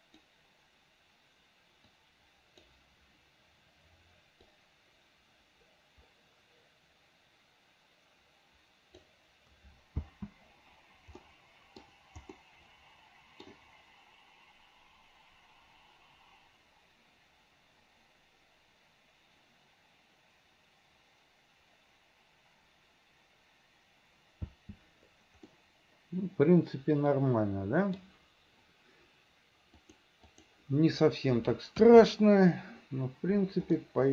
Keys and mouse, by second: 2.0 click, 5.0-9.6 drag, 10.2 space, 11.3 middle click, 12.5-13.6 middle drag, 24.5 space, 25.6-28.1 middle drag, 29.9 click, 31.9 KP_1, 33.9 click.